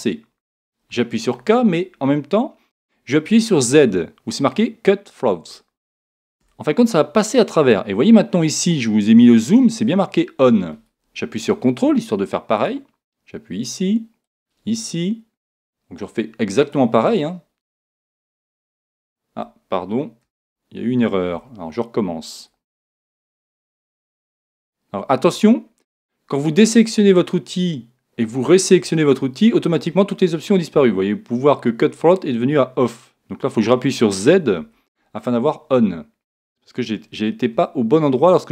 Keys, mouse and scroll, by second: 0.9 k, 23.0 k.